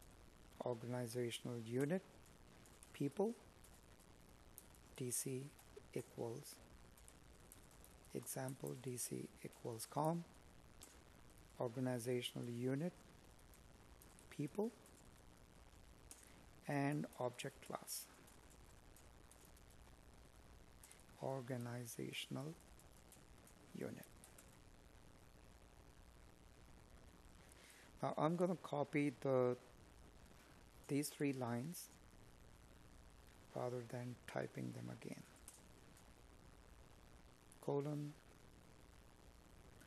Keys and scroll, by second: 4.1 space, 10.3 space, 17.7 Escape, 21.6 Up, 22.4 Down.